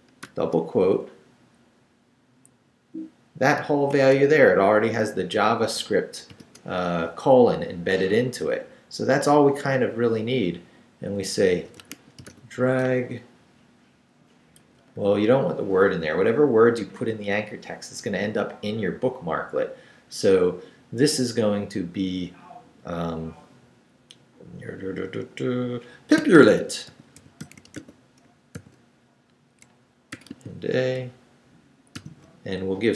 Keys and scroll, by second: 0.2 shift+', 1.0 shift+Right, 3.9 shift+', 6.3 shift+., 11.3-12.8 typing, 14.6 BackSpace, 26.1-28.5 typing, 29.9-30.9 typing, 32.0 shift+..